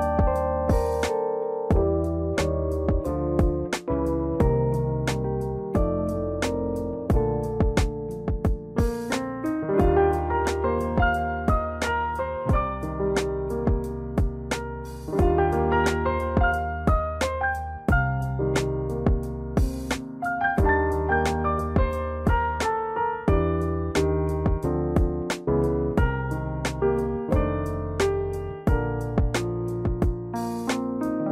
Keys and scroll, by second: 17.6 /, 18.3 1, 18.5 4, 19.6 Return.